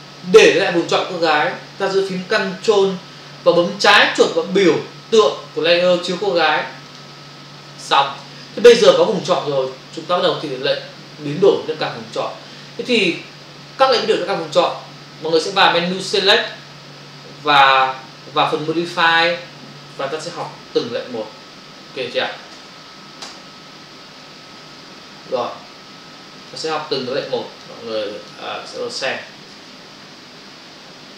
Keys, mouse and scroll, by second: 7.0 ctrl+click, 16.3 click, 20.8 Print, 21.7 Return, 23.2 Return, 24.7 ctrl+v, 26.4 click, 27.3 click, 28.0 click, 28.7 click.